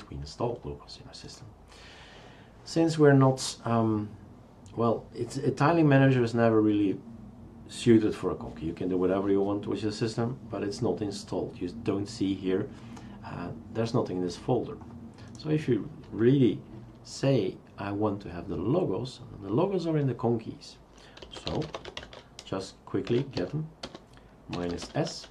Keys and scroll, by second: 21.0-25.3 typing.